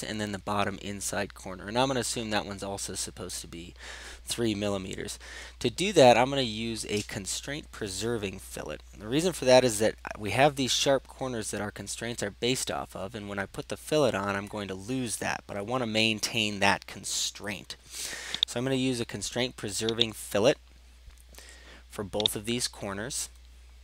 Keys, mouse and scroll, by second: 7.5-8.7 scroll down 6, 8.7 scroll down 1, 10.0-11.2 scroll up 6, 11.2 scroll up 1, 18.6 click, 20.1 click, 22.4 right click.